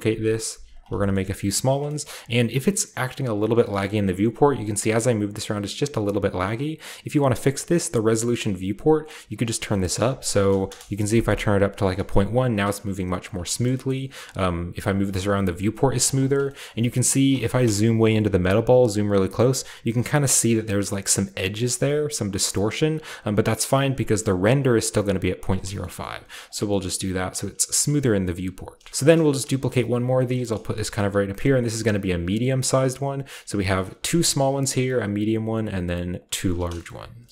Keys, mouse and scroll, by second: 0.7 click, 1.0 shift+middle click, 1.1-3.4 scroll up 1, 1.4-2.1 typing, 1.7-3.4 middle drag, 3.4 right click, 3.7-5.5 shift+middle drag, 3.7-5.5 shift+scroll up 1, 4.0 typing, 5.6-6.9 right drag, 9.0 click, 9.3 click, 9.9 BackSpace, 10.1 BackSpace, 10.2 BackSpace, 10.6 1, 10.7 Return, 11.9 g, 12.5 drag, 12.7 g, 13.2 click, 13.9-15.6 scroll up 1, 14.1 g, 15.6-16.2 scroll down 1, 16.2 right click, 16.6 scroll up 1, 17.0 scroll down 2, 18.0 KP_5, 18.4-20.8 scroll up 1, 22.5-25.5 scroll down 1, 25.5-26.4 scroll down 1, 25.7 shift+middle click, 26.1 g, 26.8-28.3 scroll down 1, 28.3-28.9 scroll down 1, 28.3 KP_5, 29.1-30.6 scroll up 1, 29.5-31.7 typing, 30.0 click, 30.5 click, 30.9 click, 31.2 click, 31.6 click, 32.8-34.1 typing, 33.0 click, 36.2 right drag, 36.6-37.3 scroll down 1.